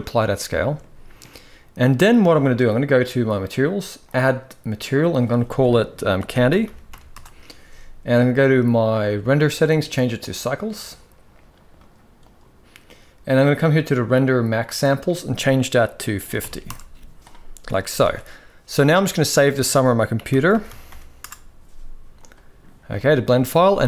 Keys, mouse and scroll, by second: 0.3 shift+middle drag, 3.1 click, 4.8-6.9 drag, 8.7 click, 9.4-10.1 drag, 11.6-12.2 drag, 14.5-16.4 drag, 17.7 ctrl+s, 22.8-23.1 shift+middle drag, 23.7-23.8 shift+middle drag.